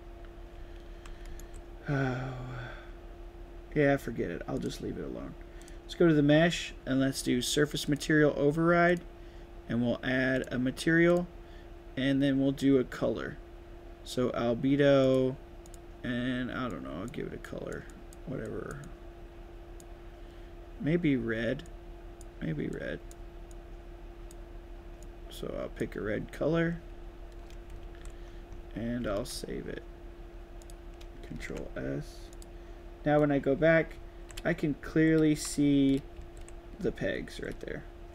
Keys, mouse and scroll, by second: 0.3-1.4 right drag, 0.5 w, 1.2 s, 4.5 click, 5.6 click, 7.8 click, 8.8 click, 10.3 click, 11.0 click, 15.0 click, 15.6 click, 16.6-17.0 drag, 17.4 drag, 17.8 click, 18.4 drag, 18.8-19.7 drag, 21.6-22.1 drag, 22.7-23.0 drag, 23.4-24.2 drag, 25.0 click, 26.6-27.0 scroll down 3, 27.8 ctrl+s, 28.2-28.6 scroll down 3, 29.0 ctrl+s, 30.5 click, 31.5 ctrl+s, 32.3 click, 33.2 right click, 33.3-37.7 typing, 34.5 right click, 37.3 right click.